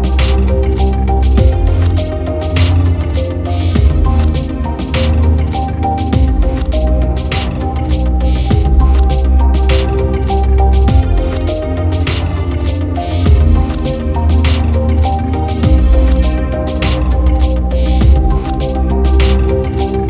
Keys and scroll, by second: 15.7 ctrl+u.